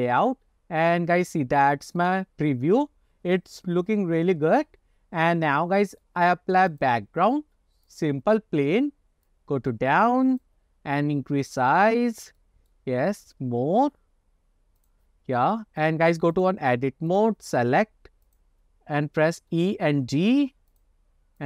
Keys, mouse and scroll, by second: 0.3-1.0 scroll down 2, 1.0-1.9 scroll up 2, 2.1 click, 3.8 ctrl+s, 5.2 scroll down 2, 5.5-6.1 middle drag, 6.8-8.1 drag, 8.7-9.3 scroll down 1, 9.3-10.6 drag, 11.0 s, 12.2 scroll down 2, 12.5 middle click, 13.6 s, 15.9-16.5 drag, 17.2 click, 18.3 click, 19.6 e.